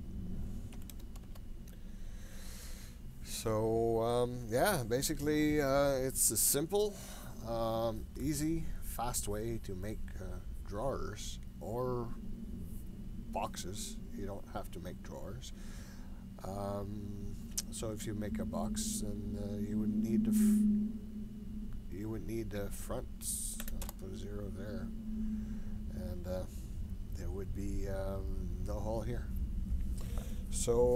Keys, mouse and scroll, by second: 20.9-25.3 drag.